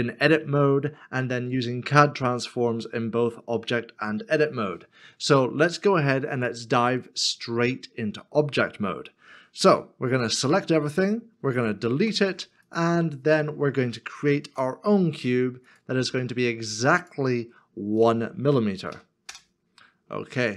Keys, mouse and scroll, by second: 6.8 middle click, 12.0 x, 14.5 shift+a.